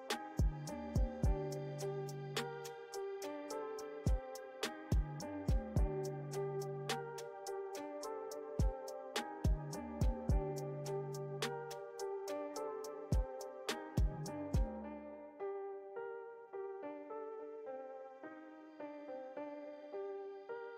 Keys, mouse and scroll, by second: 0.8 shift+click, 1.5-5.2 middle drag, 5.2 ctrl+z, 5.5 ctrl+z, 5.7 ctrl+z, 5.9 ctrl+z, 6.5-7.7 middle drag, 7.7 space, 8.1 f, 9.1-11.0 drag, 11.0 space, 11.3-13.0 drag, 13.0 middle click, 13.7 f, 14.4-18.0 drag, 18.0 middle click, 18.6 click, 19.0 middle click, 19.7-20.7 drag.